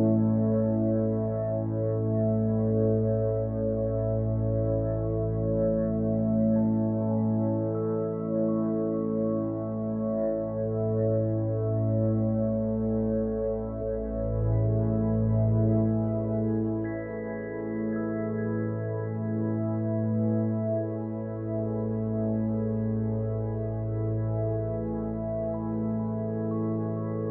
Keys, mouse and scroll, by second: 15.7 p, 20.4 Tab, 24.7 g.